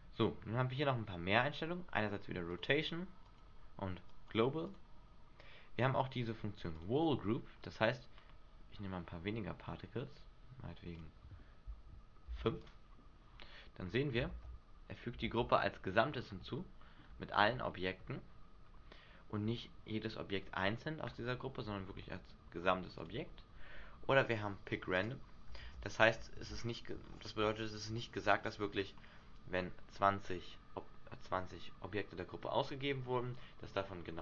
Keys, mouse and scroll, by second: 2.8 click, 3.5 click, 4.9 click, 7.2 click, 8.1-8.5 scroll down 2, 9.2-9.8 scroll up 2, 10.1-10.7 scroll up 2, 11.6 click, 14.5 alt+a, 15.4 alt+a, 16.3-16.9 scroll up 4, 16.7 shift+middle click, 17.4-17.9 scroll up 2, 17.9 shift+middle click, 18.8-19.3 scroll down 4, 20.5-22.4 scroll down 6, 23.2 click, 25.2 click, 25.8 alt+a, 26.6 alt+a, 26.7-27.4 scroll down 8, 27.4-27.8 scroll up 5, 27.8 Escape, 28.2 click.